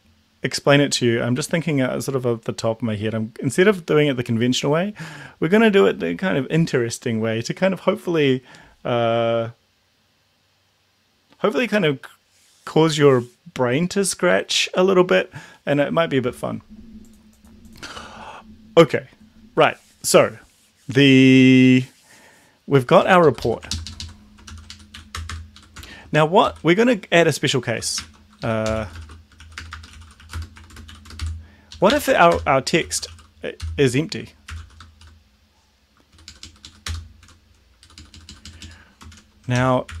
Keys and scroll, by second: 23.0 Down, 23.3 Left, 23.4 Left, 24.4 ctrl+x, 24.7 Up, 24.9 End, 25.1 Return, 25.3 Return, 25.5 Up, 25.7 Tab, 26.4 ctrl+v, 28.0 shift+Home, 28.4-33.6 typing, 31.7 Left, 32.0 End, 32.3 Return, 34.7 s, 34.9 shift+-, 36.2 Down, 36.3 Down, 36.4 Down, 36.6 Down, 36.9 Return, 37.2 Page_Down, 37.9 Down, 38.0 Down, 38.1 Down, 38.3 Down, 38.5 Down, 38.6 Down, 39.2 shift+Home, 39.5 ctrl+x, 39.6-40.0 typing.